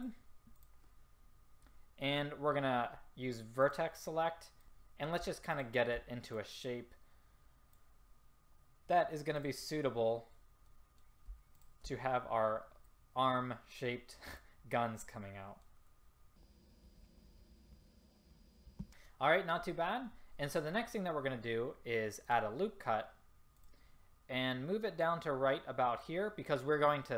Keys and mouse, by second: 4.6 ctrl+z, 7.6-9.8 drag, 15.0-16.5 middle drag, 16.8-18.6 middle drag, 18.8 a, 22.3-26.0 drag.